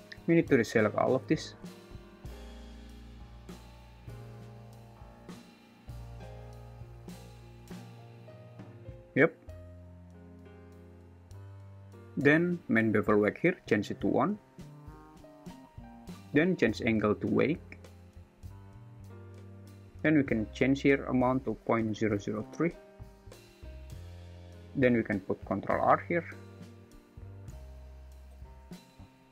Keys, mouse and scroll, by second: 2.7 middle click, 5.7 super+z, 6.5 super+z, 8.9 click, 8.9 `, 11.8 `, 12.7 `, 14.5 click, 16.7-17.9 drag, 20.2-22.3 drag, 22.0 0, 24.2 alt+z, 25.9 ctrl+r, 28.3 ctrl+b.